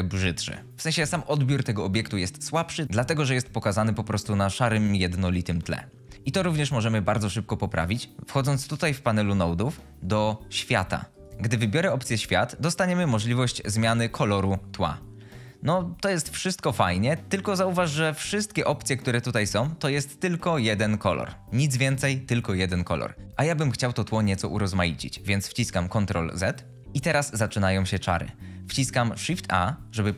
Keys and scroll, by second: 25.8 ctrl+z, 29.2 shift+a.